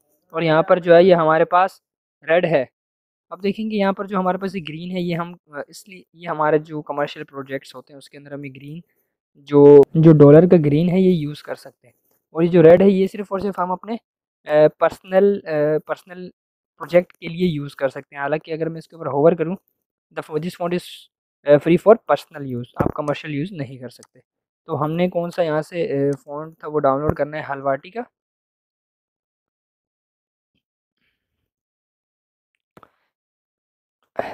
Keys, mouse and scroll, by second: 23.0 click, 27.5-30.1 typing, 31.2-33.1 typing, 34.2 typing.